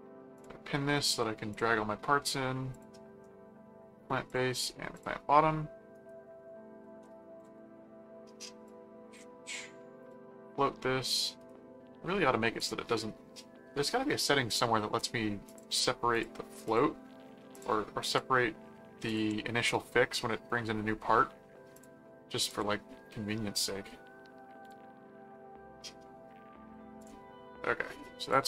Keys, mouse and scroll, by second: 0.3 click, 1.5 click, 2.7 click, 4.3 click, 5.0 click, 5.9 right click, 6.8 ctrl+7, 7.4 middle click, 8.6 click, 10.0 click, 11.0 right click, 12.6 click, 14.5 click, 15.4 ctrl+click, 16.1 ctrl+click, 17.5 ctrl+click, 19.0 ctrl+click, 21.7 click, 22.5 click, 24.6 click, 27.0 click, 28.3 click.